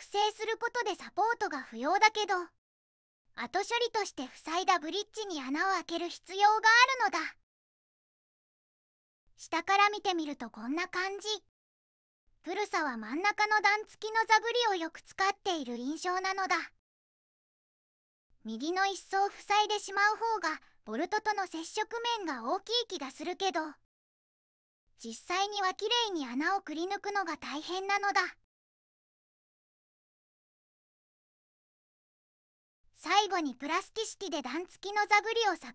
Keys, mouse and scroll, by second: 8.4 click, 16.3 click, 31.5 ctrl+z, 31.8 ctrl+z, 33.4 middle click.